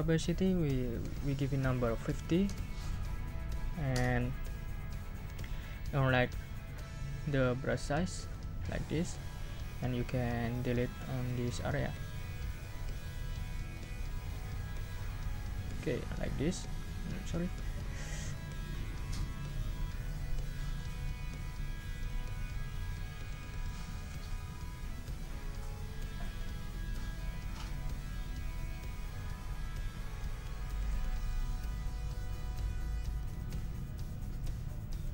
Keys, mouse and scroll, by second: 0.4 click, 1.6 ctrl+a, 2.1 ctrl+5, 2.4 ctrl+0, 3.9 Return, 8.2 click, 10.5 click, 12.9 click, 13.3 click, 13.7-16.0 drag, 16.1 ctrl+scroll up 2, 16.6-17.0 ctrl+scroll down 4, 17.0-17.6 ctrl+scroll up 6, 17.6-18.1 ctrl+scroll down 4, 18.1-18.9 ctrl+scroll up 6, 18.9 ctrl+scroll down 2, 19.6 ctrl+scroll down 1, 20.0 ctrl+scroll up 2, 21.5-25.6 drag, 26.1 click, 26.4-29.4 drag, 30.3 click, 31.2 click, 32.3-35.1 drag.